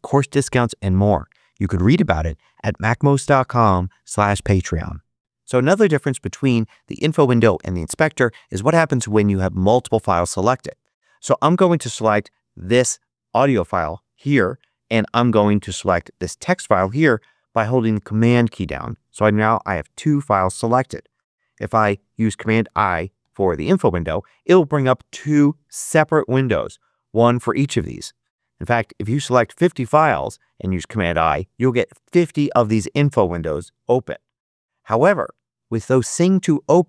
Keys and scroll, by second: 23.1 super+i.